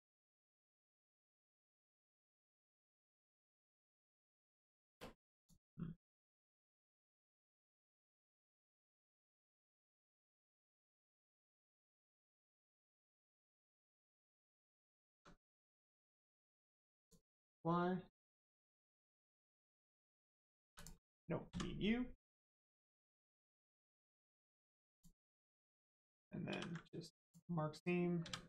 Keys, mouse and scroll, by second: 0.7 Tab, 2.2 click, 5.3 click, 9.4 shift+middle click, 10.0 scroll down 1, 10.3-10.9 scroll up 1, 12.4 scroll down 1, 12.6 middle click, 14.1-14.4 scroll up 1, 14.4 Tab, 14.8 middle click, 15.0 Tab, 17.0 click, 18.6 middle click, 19.0 Tab, 19.2 middle click, 19.7 click, 20.6 3, 20.7 click, 21.4 x, 24.0 click, 24.3 middle click, 24.9 click, 25.4 middle click, 26.5 ctrl+e, 27.2 click, 28.2 a.